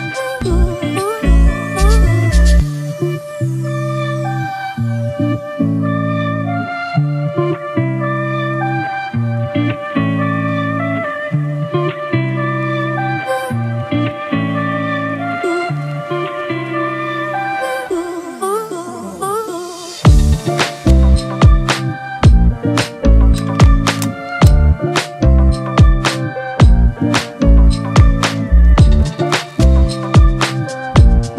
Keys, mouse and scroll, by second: 1.8 double click, 5.1 double click, 14.3 ctrl+-, 14.7 ctrl+-, 21.7 alt+right click, 28.4 alt+click, 30.0 ctrl+t.